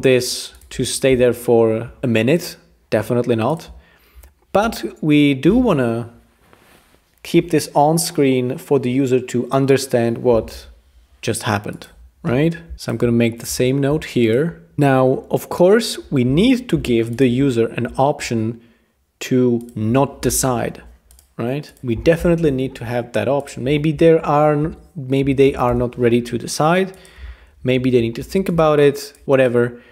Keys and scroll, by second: 16.7 p, 20.3 Return, 21.9 0, 22.2 Return, 24.6 Page_Down, 25.2 Page_Down, 25.4 Page_Up, 25.7 Return, 27.8 super+d, 28.2 shift+v.